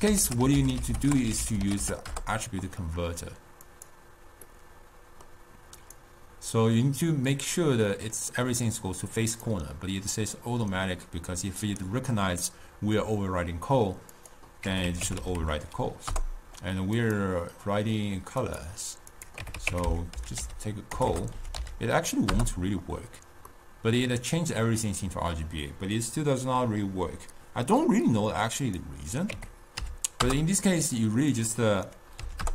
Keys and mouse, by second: 0.4 t, 4.9-6.0 middle drag, 6.0-9.3 drag, 9.6 click, 14.4-21.2 drag, 21.2 BackSpace, 23.7-26.9 middle drag, 28.8-32.5 drag.